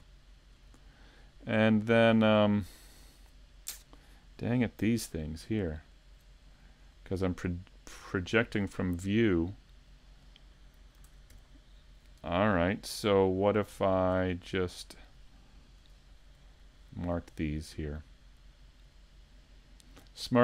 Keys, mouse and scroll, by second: 0.2 shift+middle click, 0.2 scroll down 1, 0.8 scroll down 1, 1.2 middle click, 1.7 shift+middle click, 2.1 scroll up 2, 2.5 shift+middle click, 3.0 middle click, 5.9 alt+right click, 6.9-7.3 scroll up 2, 7.2 middle click, 8.2 shift+middle click, 9.2 middle click, 11.1 ctrl+Tab, 13.8 shift+middle click, 14.3 middle click, 15.8 KP_Decimal, 16.5 middle click, 17.2 middle click, 18.8 right click, 19.2 middle click.